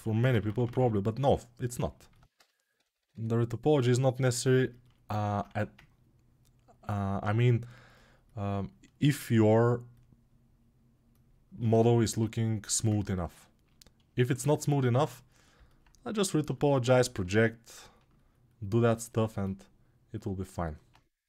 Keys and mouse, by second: 0.6 [, 2.1 g, 5.2 1, 21.1 g.